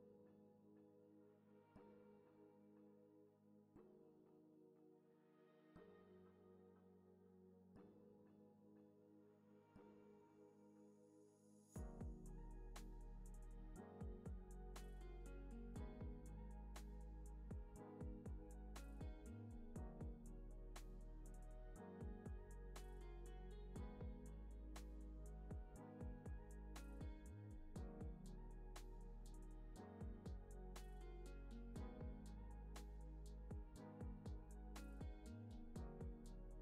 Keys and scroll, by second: 5.4 space, 15.4 v, 17.9 space, 18.9 super+-, 31.0 space, 32.4 space.